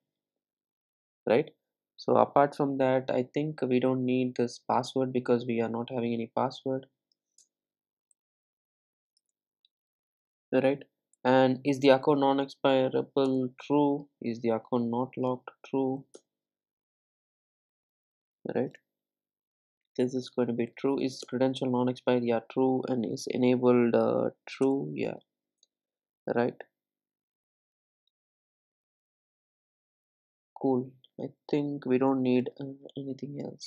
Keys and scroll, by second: 13.3 Return, 21.3 Return.